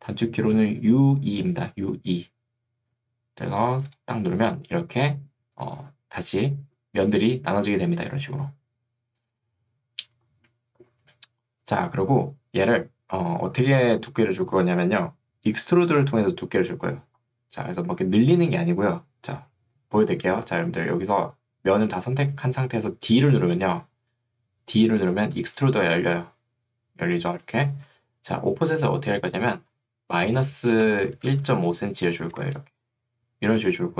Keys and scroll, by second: 23.4 d, 25.2 ctrl+2, 28.0 Escape, 30.8 BackSpace, 31.6 5, 32.4 Return.